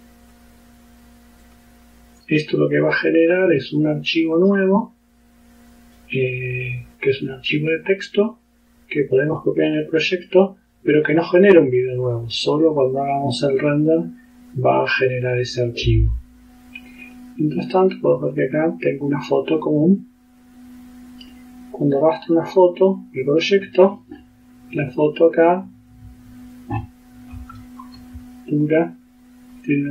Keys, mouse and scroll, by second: 0.0 click, 1.5 click, 17.1 click, 19.4-20.7 drag, 22.4 click, 23.3 click, 25.5 click, 27.6-28.1 ctrl+scroll up 2, 28.6 ctrl+click, 29.0 click.